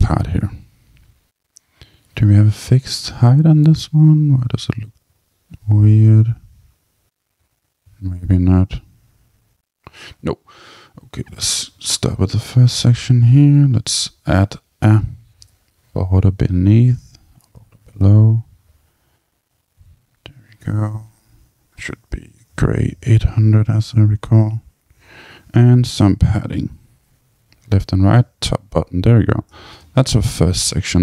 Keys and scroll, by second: 26.9 Tab, 28.2 Tab.